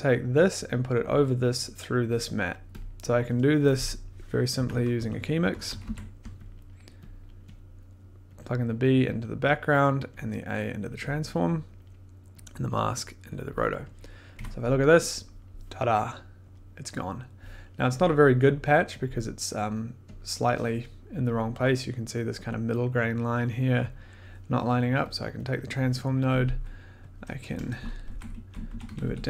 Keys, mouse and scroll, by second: 0.4 click, 1.3 click, 2.4 click, 2.8 click, 3.7 click, 4.5 Tab, 4.6-6.3 typing, 6.5 click, 7.2 click, 7.6 click, 7.7 middle click, 9.0 click, 9.0-9.6 scroll, 9.6 click, 10.8 click, 11.1 click, 11.7 click, 13.4 click, 14.3 click, 14.3 1, 16.5 click, 17.1 click, 19.0 click, 19.1 middle click, 20.1 click, 25.1 click, 25.3 click, 25.4 click, 25.5 click, 27.1 click, 27.5 BackSpace, 28.0 Left, 28.3 Left, 28.6 Down, 28.8 Down, 29.0 Down, 29.2 Down.